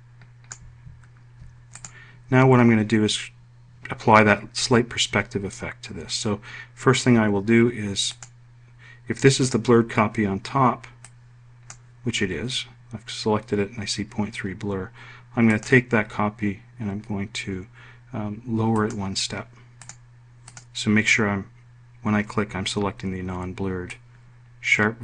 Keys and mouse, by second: 2.4 click, 8.8 click, 11.8 click.